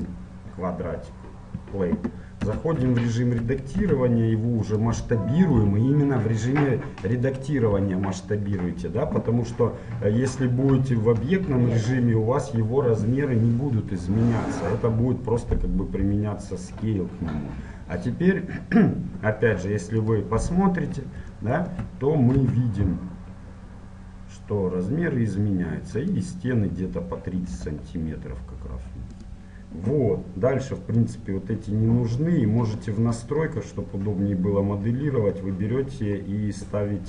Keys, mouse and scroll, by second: 0.9-4.0 middle drag, 2.5 Tab, 3.8 s, 4.0-5.0 drag, 5.7 g, 7.6-9.7 middle drag, 14.7-20.0 middle drag, 16.1 n, 20.0-21.7 drag, 21.7-23.2 middle drag, 22.4 s, 23.2 click, 27.7 g, 31.2-32.7 drag, 32.7-37.0 middle drag.